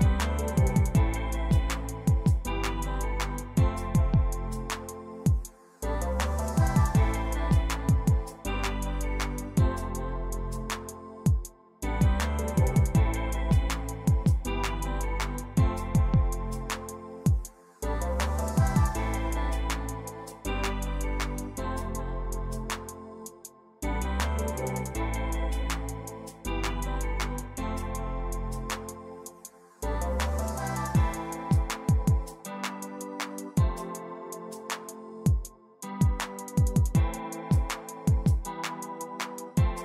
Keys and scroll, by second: 18.5-19.9 typing, 25.6 e, 28.3 7, 28.8 Return, 33.0-34.8 typing, 34.9 Return, 36.6 f, 37.4 4, 37.7 Return, 39.5 z.